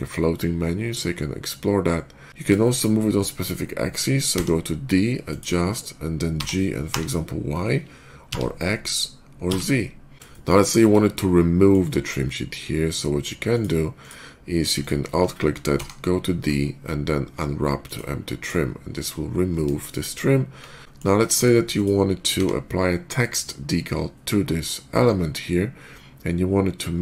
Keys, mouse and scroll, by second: 2.2 y, 2.4 shift+middle click, 4.2 d, 5.1 click, 6.2 g, 7.4 y, 8.9 x, 10.9 shift+middle click, 13.3 shift+click, 13.8 shift+click, 14.6 alt+click, 15.6 d, 17.7 click, 18.2 click, 19.3 middle click, 19.6 shift+middle click, 21.2 shift+middle click, 21.6 shift+click, 22.2 d.